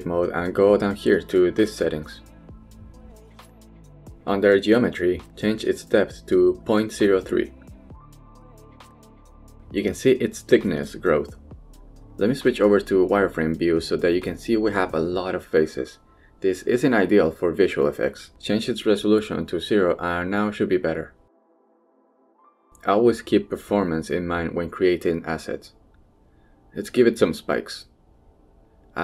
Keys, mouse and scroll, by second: 0.2-0.9 middle drag, 1.3 click, 1.7-2.3 middle drag, 5.1 click, 6.5-9.0 drag, 10.6-11.1 shift+middle drag, 11.9 shift+middle click, 12.8-13.2 shift+middle drag, 14.3 z, 18.8 click, 22.3-22.9 middle drag, 23.4 shift+middle drag, 23.7-24.0 middle drag, 24.6 drag, 24.9 z, 25.8 middle drag, 26.2 shift+middle drag, 27.1 shift+a.